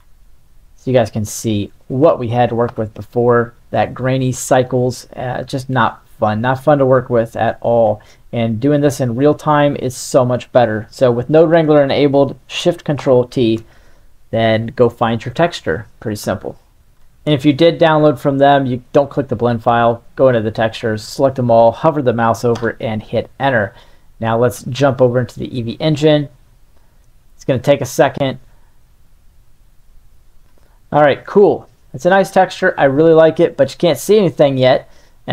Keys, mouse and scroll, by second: 1.1 click, 1.7-2.0 drag, 2.6 n, 3.8 click, 5.4 click, 8.0 middle click, 8.7 middle click, 9.2-11.6 drag, 13.2 ctrl+shift+t, 30.9-31.4 middle drag, 32.2 middle click, 34.4-35.3 drag.